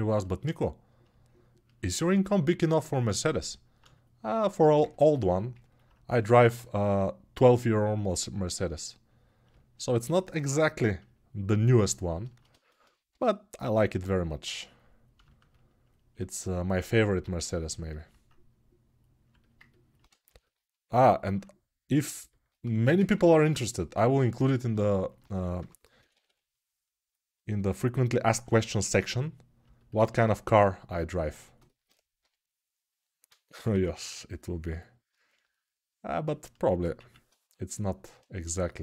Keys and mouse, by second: 6.1 g, 12.0-16.0 alt+shift+right drag, 16.0-30.9 ctrl+alt+drag, 23.4 1, 25.3 g, 30.9-37.8 alt+right drag, 33.3 p, 33.5 [, 37.8-38.8 ctrl+shift+drag.